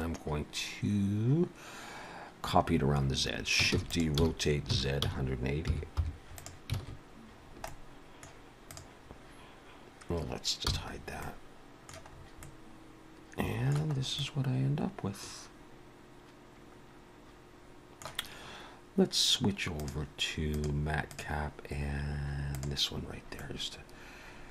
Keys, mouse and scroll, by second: 3.7 shift+d, 4.2 r, 6.9 alt+a, 7.4 scroll down 2, 7.7 middle click, 8.7 click, 10.7 h, 10.9-11.3 scroll down 3, 11.2 middle click, 12.1 scroll up 3, 12.4 middle click, 14.0 scroll up 1, 14.2 middle click, 19.8 click, 23.0-24.5 scroll down 3, 23.4 middle click.